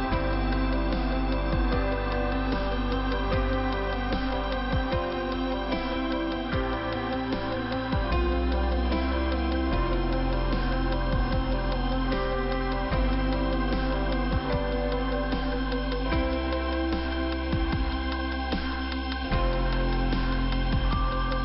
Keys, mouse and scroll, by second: 3.1 ;, 3.7 click, 4.6 middle click, 7.2-8.2 scroll down 1, 9.8 click, 10.5 middle click, 12.7 click, 12.9 right click, 13.0 double right click, 13.4 click, 17.9 click, 18.5 scroll up 2, 19.8 click, 20.8 click.